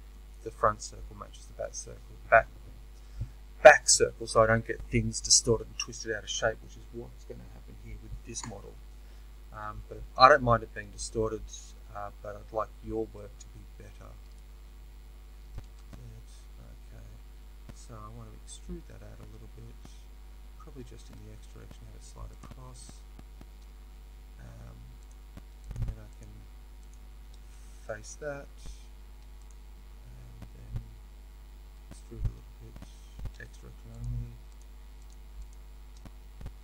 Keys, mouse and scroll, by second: 12.9 f, 15.6 ctrl+z, 15.6-22.2 right drag, 18.2 e, 22.2 middle click, 22.4 click, 23.2-25.0 right drag, 25.0 click, 25.6 shift+click, 27.8 f, 29.4 click, 31.7 e, 34.0 click, 34.5 shift+click.